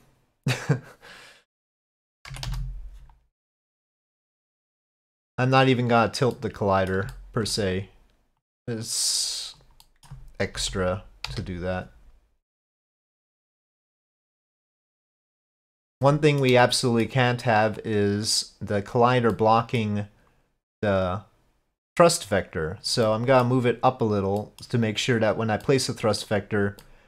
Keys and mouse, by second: 4.8-5.8 drag, 6.4 middle click, 7.2 shift+middle click, 8.5-9.6 drag, 9.9 middle click, 10.6 KP_4, 10.6 KP_5, 11.3 KP_1, 12.9-15.0 drag, 15.2-15.7 middle drag, 16.1-16.5 shift+middle drag, 16.8 middle click, 17.9-19.1 drag, 19.4 middle click, 20.8-22.9 drag, 23.1-23.4 middle drag, 24.4 middle click, 25.7-26.3 middle drag, 26.9-27.0 middle drag.